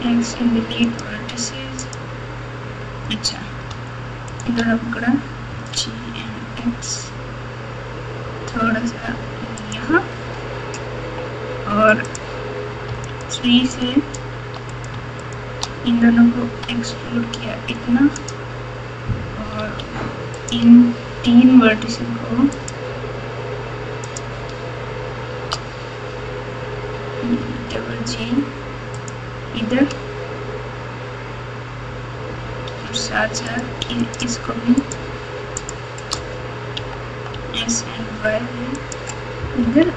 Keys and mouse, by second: 1.8 click, 4.3 shift+click, 5.4 g, 12.0 click, 12.8 3, 13.0 click, 13.7 shift+click, 14.7 click, 15.2 shift+click, 16.4 e, 19.5 1, 20.4 click, 24.1 shift+click, 27.4 g, 34.0 shift+click, 34.8 shift+click, 36.7 s, 39.6 KP_3.